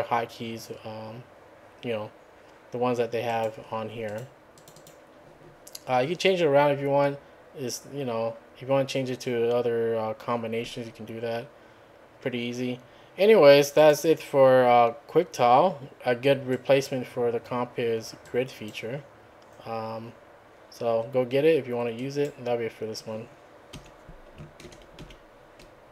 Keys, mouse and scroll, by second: 3.3 click, 4.1 click, 4.6 click, 13.8 click, 16.6 click, 18.3 click, 22.0 click, 23.8 `, 24.7 ctrl+a, 25.0 ctrl+1.